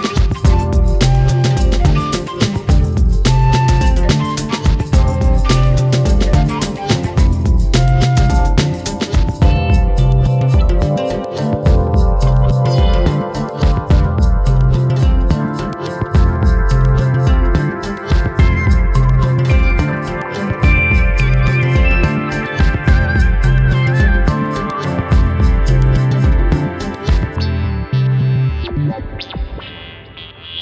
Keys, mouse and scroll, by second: 0.6 scroll up 3, 0.8-1.4 middle drag, 1.4-2.1 scroll up 1, 2.1 click, 2.5-3.5 drag, 4.2-4.6 scroll down 8, 4.7 KP_7, 5.0-5.6 scroll up 3, 5.6 g, 6.4-7.1 shift+middle drag, 7.1 KP_1, 7.5-8.1 drag, 8.1 scroll up 1, 8.2-8.7 shift+middle drag, 8.7 click, 9.1 click, 9.2 scroll down 2, 9.3-9.9 middle drag, 9.9 click, 10.2 click, 11.3 KP_1, 11.8 scroll up 1, 12.0 g, 12.8 g, 13.5 click, 13.6 scroll down 3, 13.7-14.7 middle drag, 14.7 KP_1, 15.0 scroll up 1, 15.2 drag, 15.7 Tab, 16.2 a, 16.5 Tab, 16.9 s, 17.9 click, 18.7 ctrl+a, 19.7 Tab, 20.1 s, 20.8 click, 21.4 Tab, 21.7 click, 22.6 Tab, 22.9 click, 23.9 Tab, 24.3 KP_7, 24.6-25.0 scroll up 2, 25.0-25.7 shift+middle drag, 25.7-26.7 drag, 27.2 Tab, 27.7 alt+/, 28.2-29.2 drag, 29.3-30.3 drag.